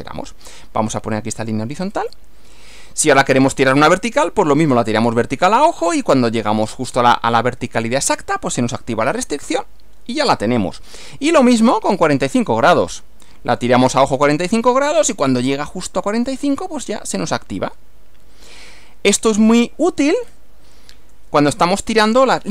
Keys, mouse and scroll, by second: 2.0 click, 3.6 click, 4.8 click, 9.6 click, 11.0 click, 12.4 click, 13.6 click, 19.2 click, 20.3 scroll down 1.